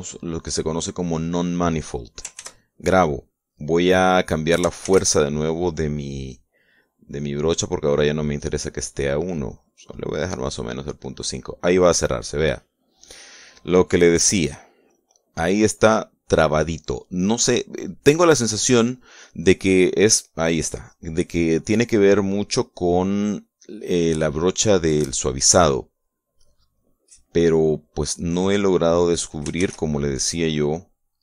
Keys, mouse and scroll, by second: 1.1-2.3 drag, 3.1 ctrl+s, 3.4 ctrl+click, 5.6 shift+f, 10.5 click, 21.7 click, 23.4 click, 24.1 click, 25.7-27.1 drag, 28.7 click.